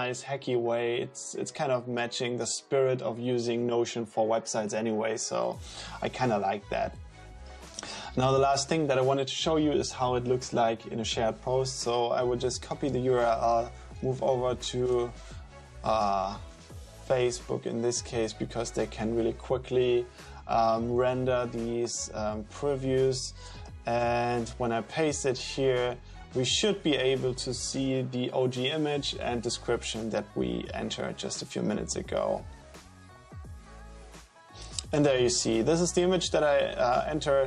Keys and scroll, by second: 12.9 super+c, 13.2 super+t, 13.6-14.7 typing, 14.9 Return, 24.0 super+v.